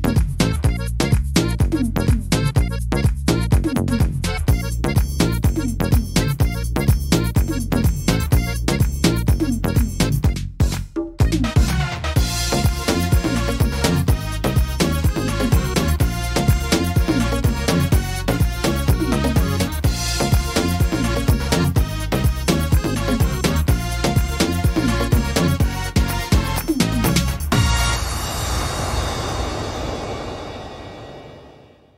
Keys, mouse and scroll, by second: 5.2 right click, 5.8 e, 7.4 click, 10.0 e, 11.5 ctrl+z, 12.4 right click, 13.7 e, 16.0 click, 18.5 click, 19.9 right click, 20.7 click, 21.7 middle click, 22.3-22.6 scroll up 2, 22.7 shift+middle click, 23.1 scroll up 2, 24.0 right click, 24.4-25.0 scroll down 1, 25.0-26.2 scroll down 2, 25.0 e, 26.2 click, 29.0 click, 30.6 e.